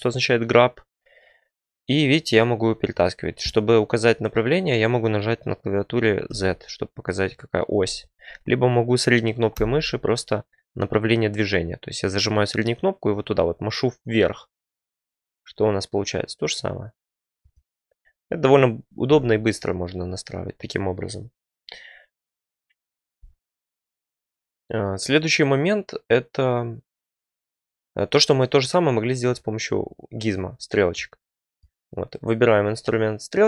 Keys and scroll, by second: 6.2 z, 7.9 Escape, 9.5 g, 19.0 g.